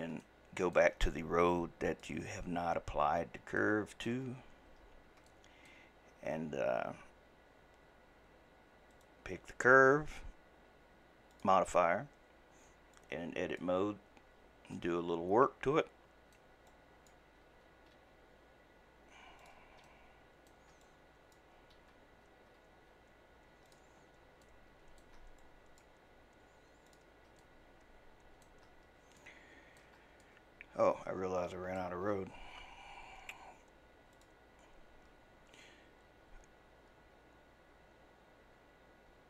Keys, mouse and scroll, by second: 0.2-1.9 shift+middle drag, 1.9 click, 3.6-4.4 shift+middle drag, 4.4 scroll up 2, 4.9-5.3 scroll down 1, 5.3-6.0 shift+middle drag, 6.0-8.9 scroll up 1, 8.9 click, 11.3 click, 13.0-14.7 drag, 14.7-16.7 middle drag, 16.7 click, 17.9 g, 19.9 shift+middle click, 20.8 click, 21.8 d, 22.7 g, 24.0-24.4 scroll down 3, 24.4 shift+middle click, 25.4 click, 25.9 g, 27.4-33.2 shift+middle drag, 34.1 click.